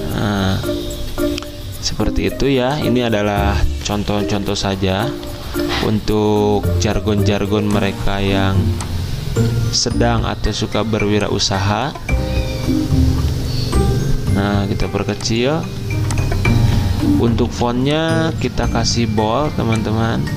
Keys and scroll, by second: 0.0-1.7 typing, 3.9 ctrl+a, 4.4-5.2 typing, 17.5 t, 18.3 ctrl+a.